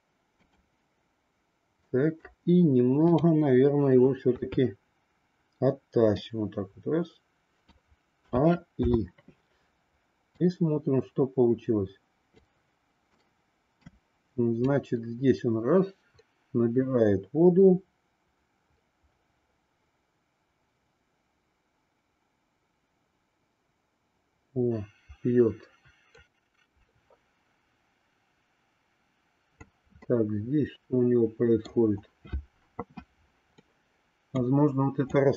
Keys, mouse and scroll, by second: 1.8 middle click, 3.1-4.1 drag, 4.4 KP_3, 6.1-7.8 drag, 8.2 a, 8.8 i, 10.3-12.4 drag, 13.2 middle click, 14.7-29.7 drag, 29.9-31.8 middle drag, 33.7 middle click, 35.2-35.3 drag.